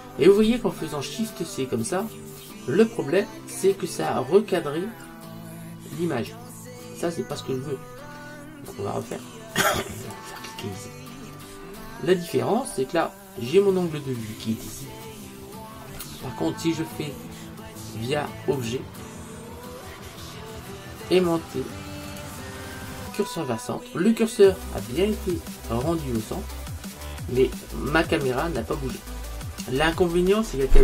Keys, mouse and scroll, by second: 9.1-11.8 drag, 11.2 middle click, 12.1-15.2 middle drag, 15.6-17.1 middle drag, 18.7 click, 24.9-26.8 middle drag.